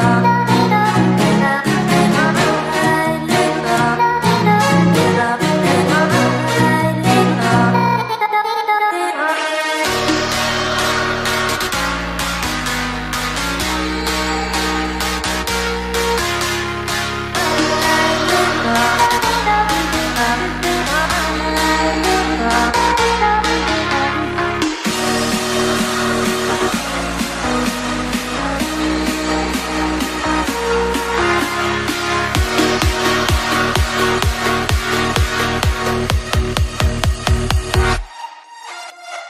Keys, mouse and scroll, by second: 0.3 g, 1.0 r, 4.3 shift+z, 12.4 shift+z, 14.2 shift+d, 15.7 KP_3, 16.5 KP_1, 16.8 KP_3, 17.1 r, 19.0-20.7 right drag, 19.2 KP_3, 20.1 r, 21.9 right drag, 22.0 KP_3, 22.3 middle click, 22.3 KP_1, 22.6 middle click, 22.9 r, 23.6-24.2 middle drag, 24.2 a, 25.9 KP_1, 25.9 KP_3, 26.3 r, 27.3 g, 29.0-35.8 drag, 35.8-37.6 middle drag, 37.6 s, 37.6-39.2 middle drag.